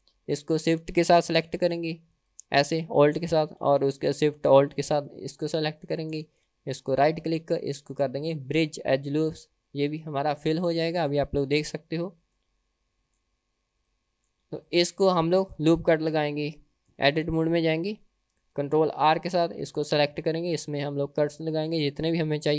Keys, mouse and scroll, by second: 2.2-3.8 alt+drag, 5.8 alt+shift+click, 6.9-9.3 right drag, 9.8-10.7 scroll down 5, 10.7 middle click, 11.7 Tab, 12.0 click, 12.4-13.3 middle drag, 13.6-14.0 scroll down 2, 14.0-14.4 middle drag, 14.6 drag, 16.0 Tab, 16.5 middle click, 19.4 ctrl+r, 21.7 middle click.